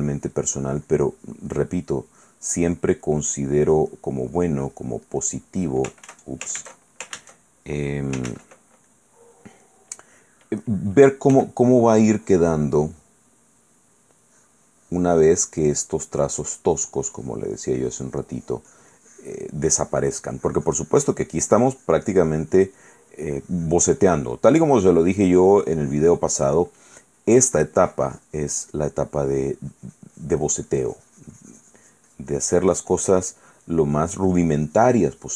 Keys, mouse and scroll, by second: 1.7 middle click, 2.4 middle click, 3.1 click, 4.1 middle click, 4.5 click, 5.4 middle click, 8.5 ctrl+z, 9.1 click, 9.8 middle click, 11.5 f, 11.9 click, 12.3 click, 13.6 middle click, 14.4-15.8 drag, 15.9 click, 16.4 click, 17.3-24.5 drag, 24.8-26.6 drag, 27.1-34.3 drag, 29.0 right click, 34.4-35.3 drag.